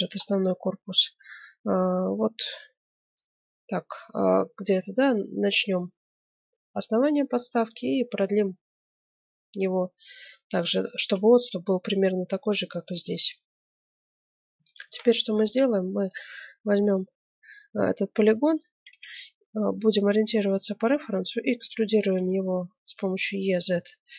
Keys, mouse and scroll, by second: 1.9-3.3 drag, 3.3-5.0 middle drag, 5.0-6.8 drag, 6.4 Tab, 7.8-9.6 drag, 10.8-12.5 middle drag, 12.7-15.6 middle drag, 14.8 ctrl+Tab, 16.0 right click, 16.6 middle click, 17.8 middle click, 18.8 KP_1, 19.9-22.7 middle drag, 22.1 e.